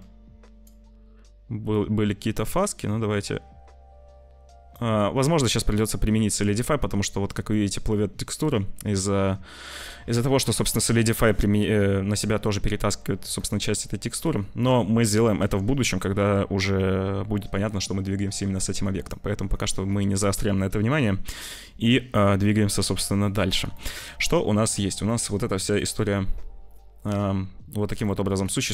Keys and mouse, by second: 0.0 shift+click, 1.7-3.2 shift+drag, 3.2-4.7 shift+middle drag, 5.2-6.2 middle drag, 7.4 middle click, 13.4 middle click, 15.4 ctrl+s, 18.5 click, 19.0 click, 22.9 ctrl+s, 23.7 shift+click, 25.0 click, 25.8 click, 27.9 click, 28.6 click.